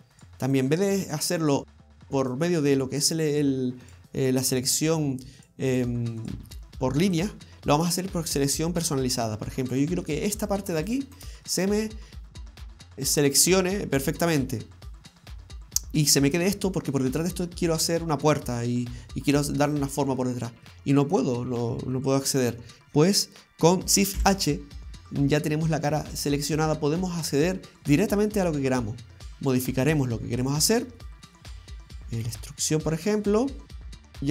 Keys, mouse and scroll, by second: 0.2 right click, 0.5 shift+right click, 0.9 shift+right click, 1.5 shift+right click, 1.8 shift+right click, 2.3 right click, 3.0 right click, 3.4 shift+right click, 3.9 shift+right click, 4.2 shift+right click, 4.6 shift+right click, 5.5 shift+right click, 5.7 shift+right click, 6.2 shift+right click, 8.3 middle click, 9.2 shift+right click, 9.7 shift+right click, 10.1 shift+right click, 10.4 shift+right click, 10.8 shift+right click, 11.1 shift+right click, 11.5 middle click, 12.1-12.6 scroll up 1, 12.6 scroll down 1, 12.7-13.4 scroll down 2, 17.7 middle click, 20.2 middle click, 21.0 middle click, 22.4-24.0 scroll up 1, 24.2 shift+h, 25.0-25.6 scroll up 2, 25.4 middle click, 26.1 shift+middle click, 26.9 middle click, 30.5 right click, 31.0 middle click, 32.3 e, 34.0 middle click, 34.0 scroll down 2, 34.1 middle click.